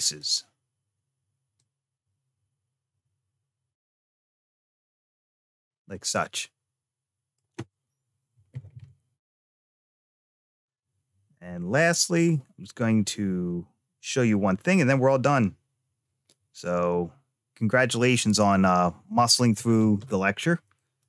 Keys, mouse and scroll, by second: 1.4-4.6 drag, 5.1 click, 5.5-5.9 scroll down 1, 5.9-7.2 middle drag, 20.8 Tab.